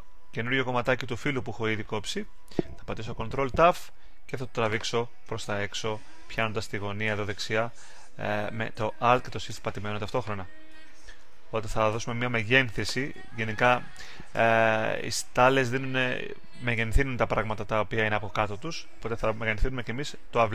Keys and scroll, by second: 3.2 super+t.